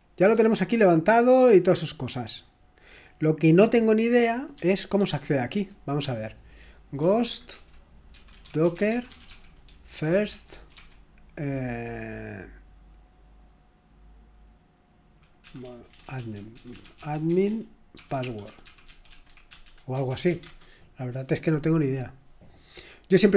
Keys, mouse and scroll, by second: 1.1-1.5 scroll up 2, 1.5-2.1 scroll down 2, 2.1-2.7 scroll up 1, 5.0 ctrl+t, 6.7-11.0 typing, 15.5-20.3 typing, 20.4 Return.